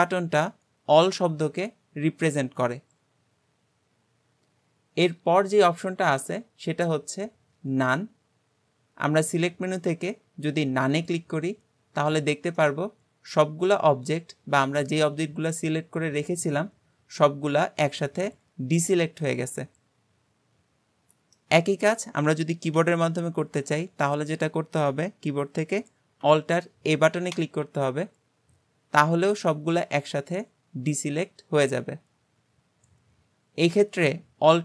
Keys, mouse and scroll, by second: 0.2-3.3 scroll up 2, 6.2-9.3 drag, 12.0-12.6 scroll down 2, 12.6-15.6 middle drag, 21.6-22.8 scroll up 3, 22.8 a, 23.4-24.2 scroll up 2, 24.2-25.9 scroll down 1, 27.4 alt+a, 29.0-32.0 middle drag.